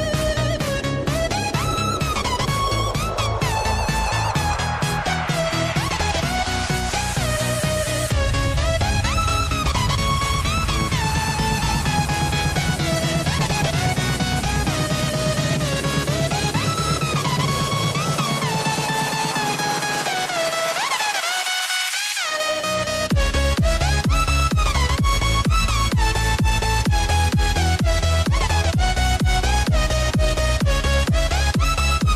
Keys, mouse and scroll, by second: 1.5 scroll down 1, 3.1-4.8 drag, 5.3-8.1 drag, 8.1 KP_0, 9.1-9.6 scroll down 1, 11.1-12.4 drag, 12.4 scroll down 1, 15.6 s, 17.8 scroll up 1, 19.2 s, 21.3-22.0 drag, 22.0 scroll up 1, 23.7 click, 26.6-27.6 scroll down 1, 27.6-30.2 drag, 31.2 click.